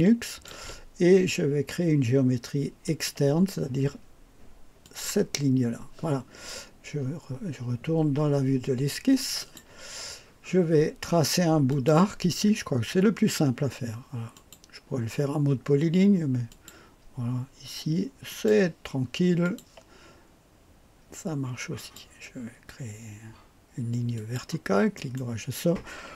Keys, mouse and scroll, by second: 2.8 click, 4.8 click, 9.4 click, 11.7 click, 14.3 click, 16.5 click, 18.3 click, 19.4 click, 21.7 click, 24.1 click, 24.9 right click.